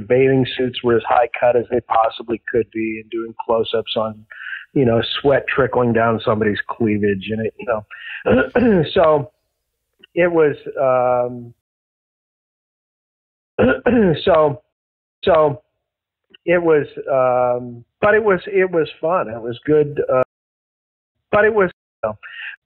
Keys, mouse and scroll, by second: 9.2-11.6 drag, 11.5 space, 12.4 Delete, 13.4 click, 13.5 space, 14.7 space, 15.0 click, 15.1 space, 15.5 click, 17.5-20.1 drag, 20.1 space, 20.8 ctrl+shift+Delete, 21.1 space, 21.6 space, 21.8 click, 21.9 space.